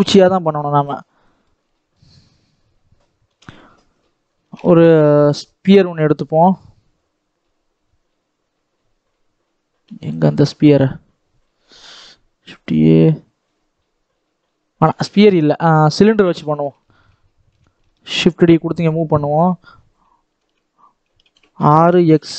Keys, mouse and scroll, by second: 0.9 scroll down 1, 1.1 middle click, 1.4 scroll up 1, 1.6 shift+middle click, 2.3-2.6 scroll down 1, 3.2 KP_7, 4.1-8.2 scroll up 1, 16.7 shift+middle click, 17.4 g, 20.3 Tab, 21.0 Tab, 21.4 r.